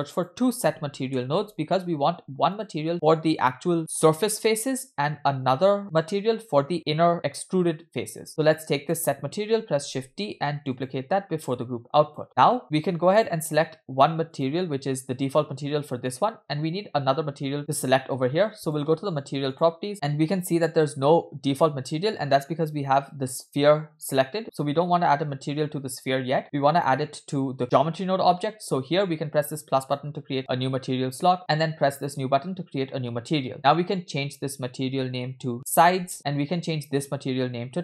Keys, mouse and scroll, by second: 3.4 click, 3.7 click, 8.3 click, 9.9 shift+d, 11.5-12.2 drag, 12.6-13.2 scroll up 4, 13.2-14.6 drag, 17.6-18.8 drag, 19.5 click, 26.8 click, 29.8 click, 32.0-32.4 drag, 33.5-36.1 drag, 36.9 click.